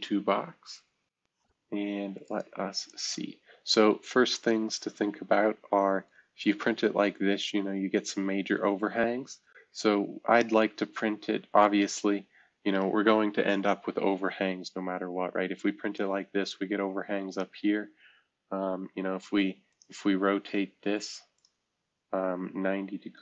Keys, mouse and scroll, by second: 1.2 super+c, 1.2 shift+click, 1.4-2.9 right drag, 2.9-6.1 drag, 6.1-8.7 right drag, 6.1-7.4 scroll up 1, 12.8 right click, 13.6 F2, 16.0-19.1 drag, 19.1 shift+F2, 19.7-21.3 shift+drag, 21.4 click, 23.1 click.